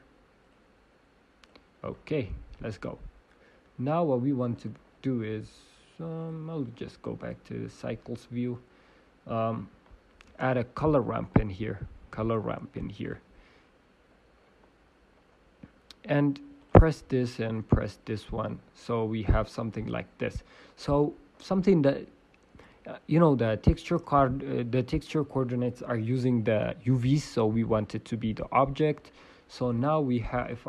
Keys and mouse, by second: 0.5-1.7 drag, 4.5-9.2 drag, 4.5-7.9 right drag, 8.2-9.2 right drag, 12.2 shift+space, 16.8-18.5 drag, 19.3-29.4 drag, 23.5-28.3 right drag, 29.3 right click, 30.4-30.6 drag, 30.4-30.6 right drag.